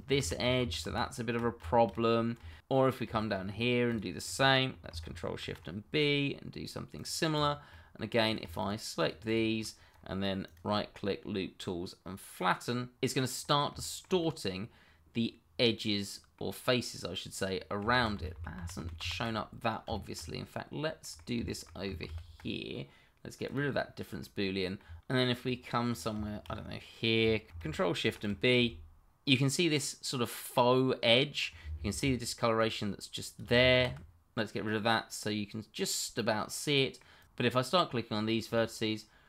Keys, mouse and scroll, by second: 0.2 ctrl+z, 1.7 shift+middle click, 1.8 middle click, 3.4-3.9 scroll up 1, 3.9 click, 4.2 middle click, 5.4 ctrl+shift+b, 6.9 click, 7.4 double click, 7.7 middle click, 8.3 click, 8.9 shift+click, 9.9-10.4 scroll up 1, 10.4 right click, 13.0 click, 13.5 middle click, 14.9 scroll up 1, 15.2 shift+middle click, 15.7 middle click, 17.8 scroll down 1, 18.1 ctrl+z, 19.3 middle click, 21.4 shift+middle click, 21.5 middle click, 22.0 ctrl+z, 23.4 click, 25.0 middle click, 26.1 shift+middle click, 26.4 middle click, 27.2 shift+middle click, 27.4 scroll up 1, 28.0 ctrl+shift+b, 29.3 click, 29.6 double click, 29.7 scroll up 1, 30.0 shift+middle click, 30.2 middle click, 33.4 d, 33.6 click, 34.5 middle click, 37.2 click, 37.9 shift+click, 39.0 right click.